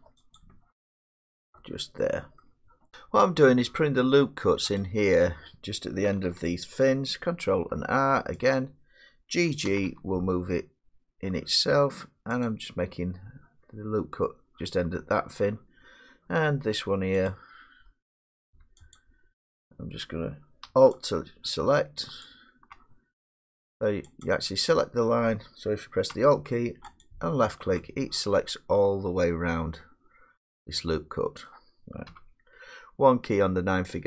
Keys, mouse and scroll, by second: 0.4-2.4 drag, 2.4 middle click, 4.8 click, 7.7 ctrl+r, 8.6 click, 9.7 g, 9.9 g, 12.5 click, 17.3 click, 19.0 super+click, 21.1 alt+click, 22.1 alt+click, 22.3 alt+click, 24.3 click, 27.1 alt+click, 31.4 middle click, 32.1 1.